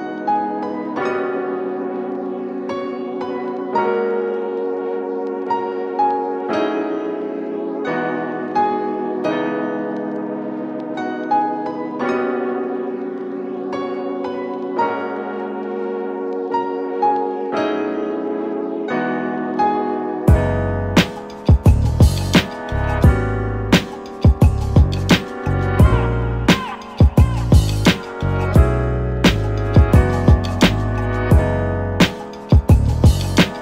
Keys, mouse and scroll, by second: 0.0 shift+d, 12.8-13.7 scroll up 11, 15.0-18.7 drag, 21.0-27.3 drag, 30.5 click.